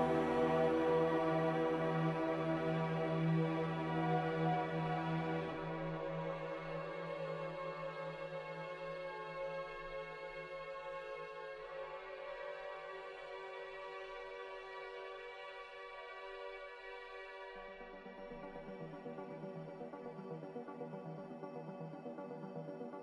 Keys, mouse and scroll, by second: 0.9-1.8 typing, 13.6 Delete, 14.9 ctrl+z, 19.0 Escape.